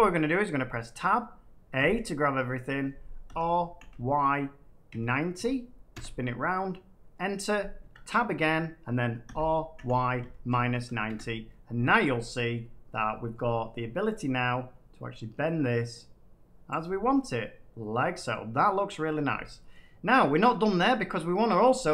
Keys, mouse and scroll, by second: 0.5 Tab, 1.7 a, 3.2-3.7 typing, 4.8-5.3 typing, 5.9 Return, 7.7 Tab, 9.2-10.6 typing, 11.0 Return, 12.2-13.7 middle drag, 12.8 scroll, 16.6 click, 18.2 middle click, 18.8 scroll up 3, 19.7 middle click, 20.4 scroll up 1, 20.8 middle click.